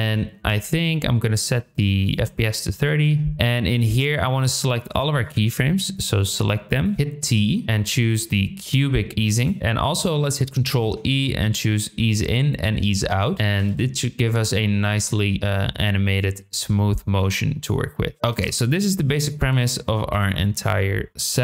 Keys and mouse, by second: 2.0-2.8 drag, 5.2 click, 5.9-6.8 drag, 6.9 t, 10.6 ctrl+e, 13.5 space, 18.3 space, 19.3 click, 20.1 g, 21.3 g.